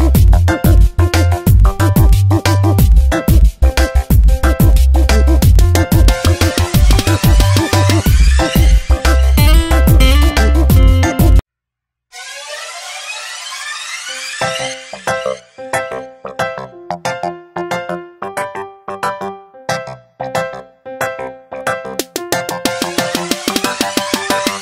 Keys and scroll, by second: 0.6 space, 5.7 space, 7.7 space, 10.2 space, 17.8 space, 20.6 space, 22.7 space.